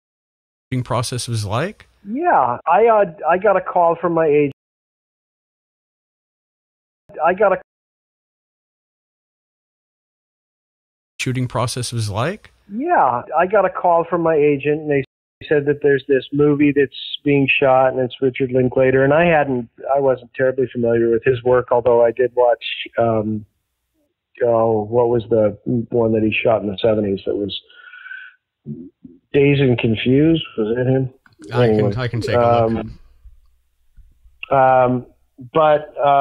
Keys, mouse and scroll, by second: 0.5 click, 0.6 space, 4.4 space, 4.5 click, 5.4-6.6 drag, 6.9 click, 6.9 space, 7.5 space, 7.7 click, 8.8-10.5 drag, 11.0 click, 11.1 space, 13.8 click, 14.2 click, 14.7 click, 14.9 space, 15.3 space, 15.8 click, 16.6 click, 17.9 ctrl+s, 19.0-20.7 drag, 21.0 click, 21.9 click, 23.2 click, 25.4-36.2 drag.